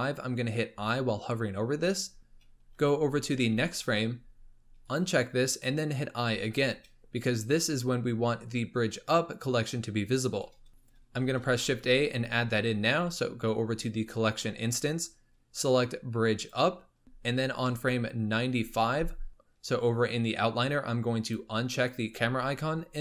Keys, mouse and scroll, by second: 0.6 i, 3.3 Right, 4.8 click, 6.1 i, 10.7 shift+a, 11.4 shift+a, 17.7 Left, 21.2 click.